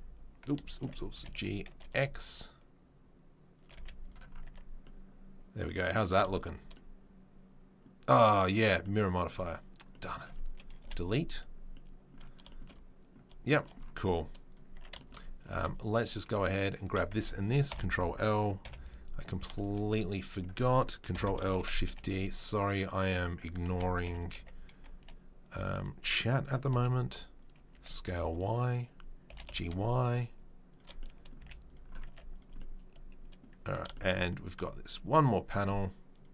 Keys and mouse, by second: 0.8 ctrl+z, 1.1 g, 3.7 z, 4.5 Tab, 10.9 Delete, 12.9-13.3 right drag, 13.3-15.7 shift+middle drag, 14.7 Tab, 15.5 Tab, 15.7 click, 15.8 middle click, 16.7 shift+click, 16.8-20.2 shift+middle drag, 17.7 ctrl+l, 18.6 KP_7, 20.2 click, 20.3-32.3 middle drag, 21.1 ctrl+l, 21.5 shift+d, 23.7 s, 27.7 s, 29.3 g, 31.4 z, 32.1 Tab, 32.3-34.4 right drag, 33.6 Tab, 34.4 click, 34.5-36.1 middle drag, 36.1 click, 36.2-36.3 middle drag.